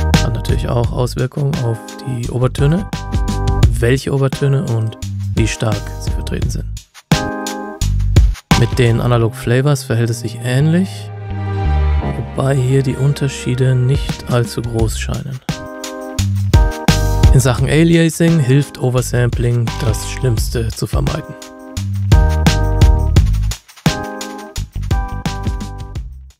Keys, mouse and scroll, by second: 9.0 click, 19.5 click.